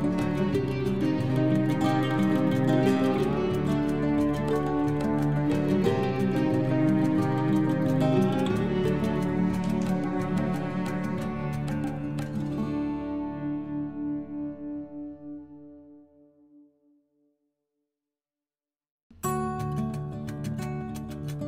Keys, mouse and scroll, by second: 8.2 shift+Num_Lock, 8.3-17.6 typing, 18.9 space, 20.3-21.2 typing.